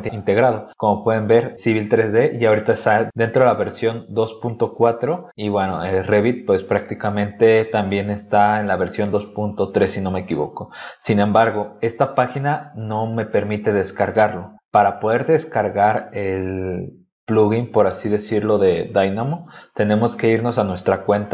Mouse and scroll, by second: 9.7 scroll up 2, 10.7-11.4 scroll down 4, 20.8 click.